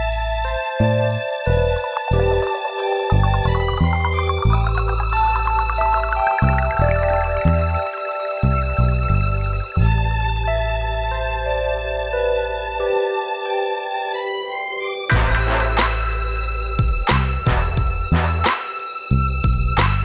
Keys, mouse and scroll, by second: 0.4 click, 3.1 click, 3.3 click, 5.8 click, 10.8 click, 11.2 click, 13.3 scroll down 2, 14.7 scroll down 1, 18.2 middle click, 19.9 click.